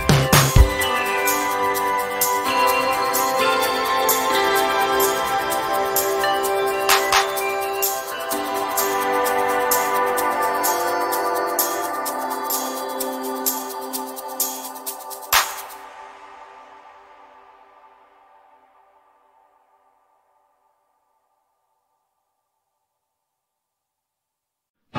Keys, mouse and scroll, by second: 1.5 ctrl+j, 2.6-3.5 drag, 7.0-7.4 shift+scroll down 1, 7.6 ctrl+scroll down 1, 9.0-10.6 drag, 16.0-17.6 drag.